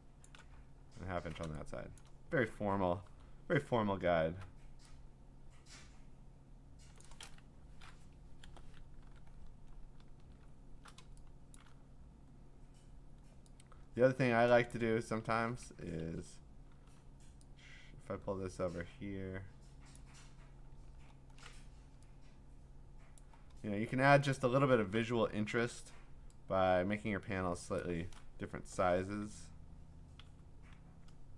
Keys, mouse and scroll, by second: 0.2 shift+click, 0.5-1.3 scroll, 2.0 click, 3.1 m, 3.9 scroll, 7.0 click, 7.4 right click, 8.2 Escape, 8.8 Delete, 9.3 ctrl+d, 9.3-9.9 ctrl+scroll, 10.5-10.9 scroll, 11.6 click, 14.7 click, 15.3 ctrl+z, 16.0 ctrl+z, 19.9 click, 20.8-23.2 scroll, 23.2 click, 24.4 click, 24.6-25.3 scroll, 25.5 m, 27.8 alt+click, 28.5 Delete, 30.2 v.